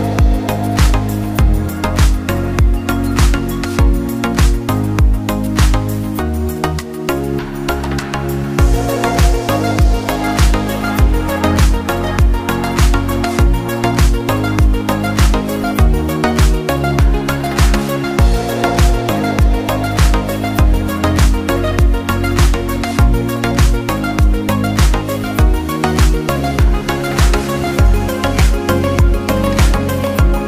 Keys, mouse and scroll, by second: 0.1 click, 0.2 click, 0.6 Tab, 1.1 click, 1.3 scroll up 2, 1.5 click, 1.9 click, 2.2 click, 2.5 click, 3.0 ctrl+r, 4.7 s, 5.6 scroll up 2, 5.8 scroll down 2, 6.1 g, 8.2 ctrl+r, 10.1 ctrl+r, 12.5 ctrl+r, 13.7 click, 14.3 click, 14.6 4, 14.7 3, 14.8 drag, 15.1 shift+drag, 15.5 |, 17.6 click, 18.3 shift+click, 18.4 click, 18.8 shift+click, 19.3 shift+click, 19.6 shift+click, 20.0-20.5 scroll down 2, 20.5 shift+drag, 20.8 shift+click, 21.1 click, 21.8 scroll up 1, 21.9-22.3 scroll down 1, 22.3 click, 22.5-23.0 scroll up 1, 23.0 Tab, 23.1 Tab, 23.3 click, 23.6 shift+click, 24.2 typing, 27.2 Tab, 27.5 ctrl+a, 28.3 Tab, 29.0 s, 29.5 i.